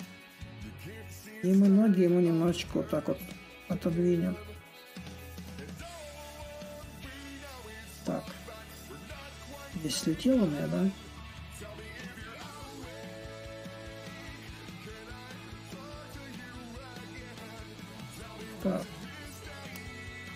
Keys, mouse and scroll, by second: 0.0 ctrl+click, 2.4-4.9 drag, 5.6 ctrl+z, 5.6-13.7 drag, 14.4-19.4 ctrl+right drag, 20.3 ctrl+right click.